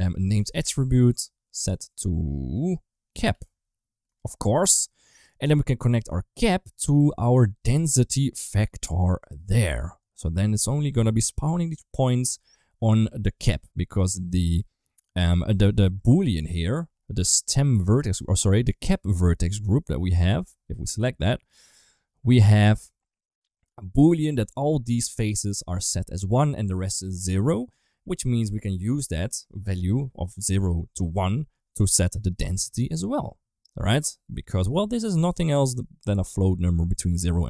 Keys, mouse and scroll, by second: 1.7-4.0 drag, 4.5 middle click, 5.1 g, 8.3-9.1 drag, 9.8-12.0 middle drag, 13.1 ctrl+s, 14.1 middle click, 15.8 Tab, 20.6 click, 22.7 click, 23.2 middle click, 31.5 middle click.